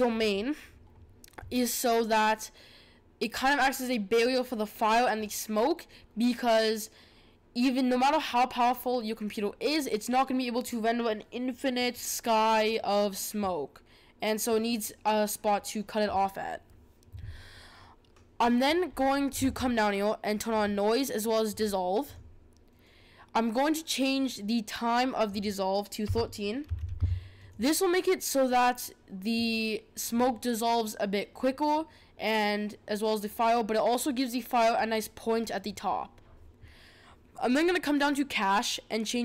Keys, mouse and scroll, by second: 18.8-20.6 scroll down 12, 20.6 click, 22.0-25.1 drag, 25.2-27.5 drag, 36.2-37.4 scroll down 1, 37.4-39.2 scroll down 1.